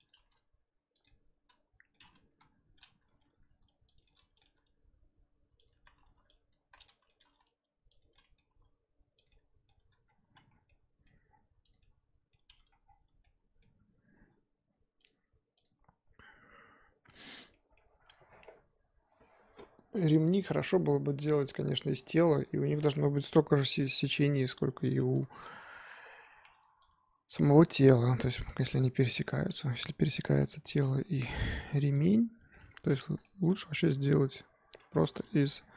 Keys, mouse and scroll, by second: 0.2 g, 1.1-2.3 middle drag, 2.3 KP_1, 3.1 r, 4.0 middle click, 4.4 r, 5.8 z, 6.5 click, 6.6 z, 6.8-7.2 middle drag, 7.2 g, 8.1-8.4 middle drag, 8.4 g, 9.3-9.8 middle drag, 9.8 Tab, 10.0-10.6 scroll down 3, 10.2 z, 10.6-11.3 middle drag, 11.3-11.7 scroll down 4, 11.7 click, 11.8-12.8 middle drag, 12.8 scroll down 3, 12.9 n, 13.2-13.7 middle drag, 13.7-14.6 scroll up 2, 16.8-17.4 scroll down 3, 17.4-18.8 scroll up 8, 17.5-17.9 middle drag, 20.3 click, 20.6 Tab, 21.0-23.0 scroll up 2, 25.4-25.9 middle drag, 25.9 Tab, 26.3 Tab, 26.5 3, 26.9 click, 28.1 l, 29.5 Tab, 30.7 shift+h, 31.0 Tab, 31.3 middle click, 31.9 click, 32.1-35.2 middle drag, 35.2 click.